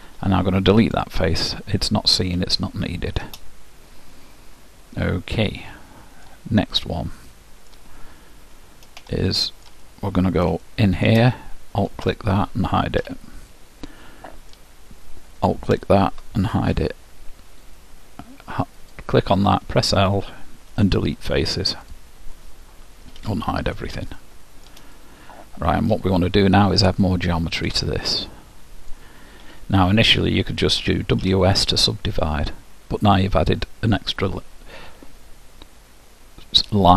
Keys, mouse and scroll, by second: 0.1 Delete, 1.6-8.7 middle drag, 9.1-12.3 middle drag, 12.1-13.9 drag, 13.0 h, 13.5-15.2 middle drag, 15.8-17.6 drag, 16.8 h, 18.8-20.7 drag, 19.5 l, 21.1 Delete, 23.2 alt+h, 24.2 middle click, 26.9-29.4 drag, 28.1 middle click, 29.5 l, 30.8 w, 36.6-36.9 drag.